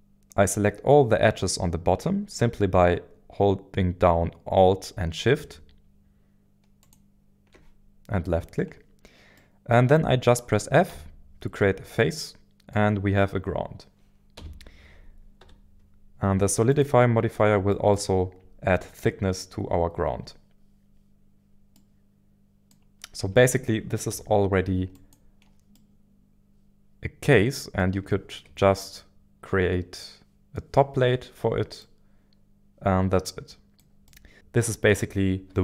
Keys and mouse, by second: 6.8 alt+shift+click, 9.4 middle click, 10.9 f, 12.0 middle click, 14.4 KP_1, 15.4 z, 17.7 shift+middle click, 21.7 middle click, 23.2 Tab, 24.1 z, 25.7-27.8 middle drag, 28.4-33.9 shift+middle drag, 34.1 middle click.